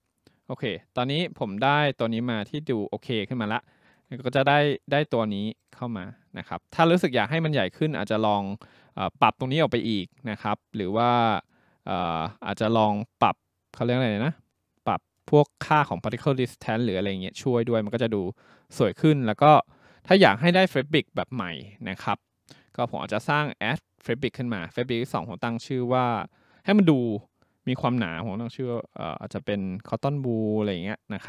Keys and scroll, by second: 28.7 w, 29.7-31.2 typing.